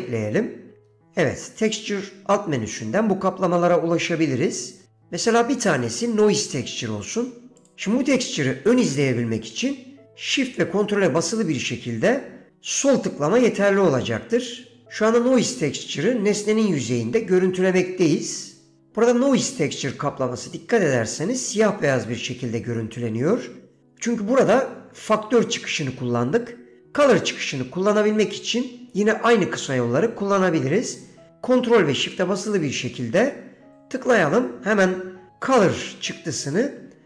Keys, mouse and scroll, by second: 1.0 shift+a, 13.1 ctrl+shift+click, 33.8 ctrl+shift+click.